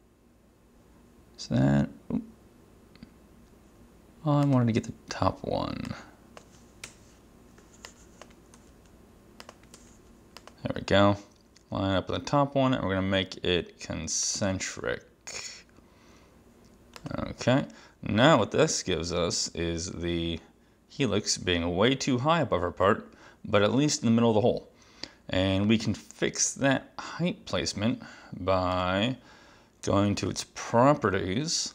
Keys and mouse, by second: 4.5 click, 6.0 click, 6.9 BackSpace, 7.9 click, 8.6 x, 9.5 click, 9.8 v, 10.5 click, 14.3 click, 17.0 click, 28.8 click, 30.2 click.